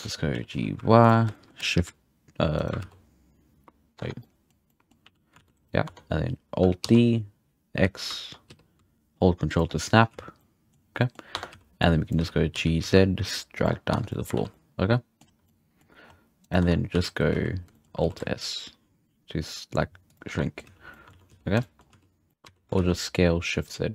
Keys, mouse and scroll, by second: 0.1 scroll up 4, 0.3 g, 1.3-1.7 shift+middle drag, 1.7 shift+d, 2.9 ctrl+z, 3.9 Tab, 4.2 middle click, 4.5 scroll down 2, 4.7 middle click, 5.0 a, 5.9 Tab, 6.8 alt+d, 9.7 scroll down 1, 9.8 middle drag, 10.1 z, 10.4-10.8 middle drag, 10.8 scroll up 2, 10.9 middle click, 11.3 Tab, 11.5 z, 11.8 click, 12.1 z, 12.5 g, 13.9 Tab, 14.1 middle drag, 14.3 alt+a, 14.5-15.2 middle drag, 15.2 scroll down 1, 15.5-16.0 middle drag, 16.0-16.4 scroll up 1, 16.4 right click, 16.6 Tab, 16.9 a, 17.3 z, 17.7 shift+middle click, 18.1 alt+s, 20.3 Tab, 20.3 middle click, 20.6 z, 20.8 scroll down 1, 20.9 middle click, 21.1 alt+a, 21.3 z, 21.6 shift+middle drag, 21.8-22.3 scroll up 1, 22.3 middle click, 22.4 s.